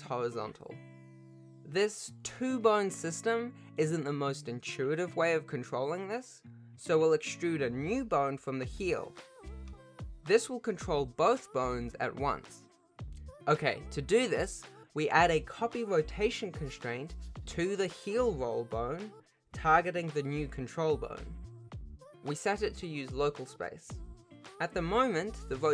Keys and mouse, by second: 1.9 r, 2.3 r, 7.2 ctrl+s, 7.2 Tab, 7.2 e, 8.7 click, 9.7 alt+p, 12.6 g, 14.2 F2, 16.4 shift+click, 19.1 ctrl+shift+click, 19.4 ctrl+shift+click, 20.7 click, 22.2 click, 22.6 r, 24.0 click.